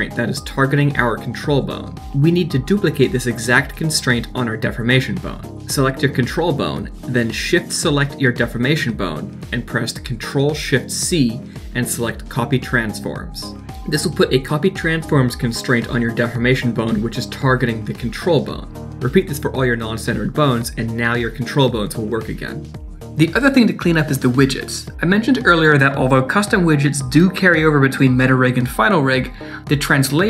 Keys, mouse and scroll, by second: 4.0 middle click, 4.7 shift+click, 5.2 shift+click, 5.3 click, 5.4 h, 5.4 click, 5.4 h, 5.5 click, 6.2 click, 7.6 shift+click, 9.2 ctrl+shift+c, 14.0 click, 14.1 click, 14.2 g, 14.4 r, 14.7 scroll down 3, 14.8 scroll up 2, 14.9 middle click, 15.0 alt+h, 15.1 middle click, 15.1 click, 15.2 click, 15.3 click, 15.4 click, 15.7 click, 15.7 click, 15.8 shift+click, 15.8 ctrl+shift+c, 16.0 shift+middle click, 16.1 click, 16.1-16.4 scroll up 2, 16.1 click, 16.2 h, 16.3 middle click, 16.4 click, 16.5 shift+click, 16.6 ctrl+shift+c, 16.8 click, 16.9 shift+click, 17.0 ctrl+shift+c, 17.0 shift+middle click, 17.2 click, 17.3 h, 17.4 click, 17.5 shift+click, 17.6 ctrl+shift+c, 17.8 click, 17.9 shift+click, 17.9 ctrl+shift+c, 18.0 shift+middle click, 18.2 click, 18.2 h, 18.3 click, 18.4 shift+click, 18.6 ctrl+shift+c, 18.7 click, 18.7 click, 18.9 scroll down 1, 19.0 shift+middle click, 19.0 click, 19.1 h, 19.2 click, 19.2 h, 19.3 click, 19.3 shift+click, 19.4 ctrl+shift+c, 19.6 click, 19.7 click, 19.8 scroll down 3, 19.8 middle click, 19.9 alt+h, 20.0 middle click, 20.2 shift+click, 20.2 middle click, 20.4 middle click, 20.4 click, 20.7 g, 21.4 r, 22.5 click, 22.7 g, 23.0 click, 24.6 click.